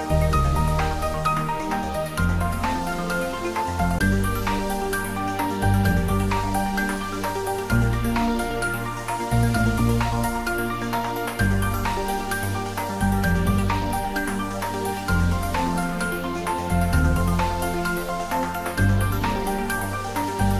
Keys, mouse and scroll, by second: 0.2 g, 0.5 z, 1.5 click, 2.6-3.6 typing, 5.0 click, 5.3 middle click, 6.4 click, 6.9-7.3 scroll up 1, 8.4 g, 8.8 z, 10.1 click, 10.8 click, 10.8 s, 12.3 click, 12.5 s, 12.9 z, 15.3 click, 15.9 g, 16.2 z, 16.9 click, 17.2-18.1 scroll up 1, 18.1 middle click, 18.6-19.0 scroll down 1, 19.0 middle click, 20.0 s.